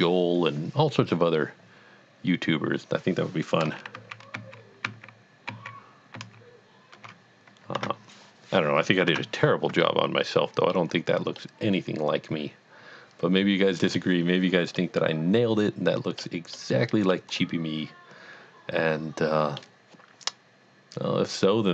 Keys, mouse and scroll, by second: 4.0 ctrl+z, 4.5 ctrl+z, 4.9 ctrl+z, 5.5 ctrl+z, 6.2 ctrl+z, 7.8 Tab, 8.2 scroll down 1, 9.1 Tab, 9.8 middle click, 10.2 middle click, 11.2 scroll down 1, 11.4 middle click, 11.8 middle click, 14.8 middle click, 16.8 middle click, 17.5 middle click, 18.9-19.9 middle drag.